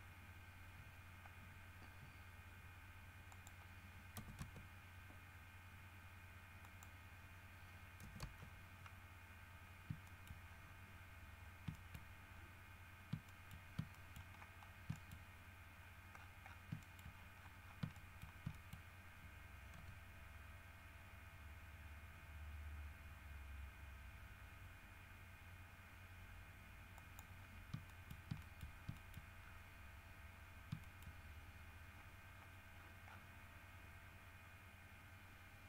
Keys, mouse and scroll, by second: 0.9 scroll down 2, 3.5 middle click, 4.3 KP_0, 4.6 KP_Enter, 6.8 middle click, 8.2 KP_0, 8.4 KP_Enter, 9.4-10.0 scroll down 4, 10.2 shift+middle click, 10.6-11.4 shift+scroll down 3, 11.6 scroll up 1, 11.9 shift+middle click, 12.5 shift+scroll down 2, 13.4 shift+middle click, 14.1 shift+middle click, 14.5-15.6 shift+scroll up 6, 15.1 shift+middle click, 16.0-16.9 scroll down 4, 17.0 shift+middle click, 17.2-19.2 shift+scroll up 9, 18.1 shift+middle click, 18.7 shift+middle click, 19.9 r, 27.1 middle click, 27.6 scroll down 1, 28.0 shift+middle click, 28.6 shift+middle click, 29.1 shift+middle click, 29.6 shift+scroll down 3, 30.6 scroll down 2, 31.0 shift+middle click, 31.7-32.8 scroll up 6, 32.9-33.5 scroll down 4, 34.2 scroll up 2.